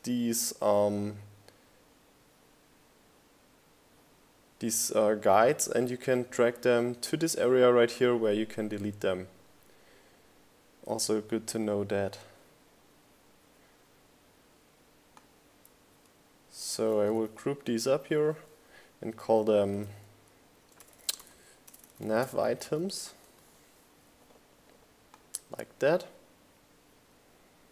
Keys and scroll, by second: 8.7 super+g, 11.0-14.8 typing.